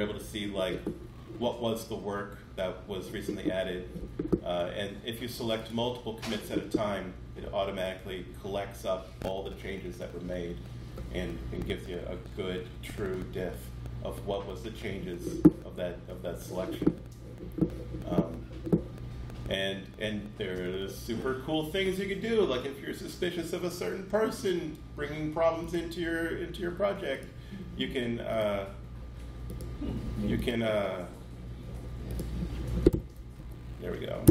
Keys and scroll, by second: 32.7-33.2 typing, 34.1 Return.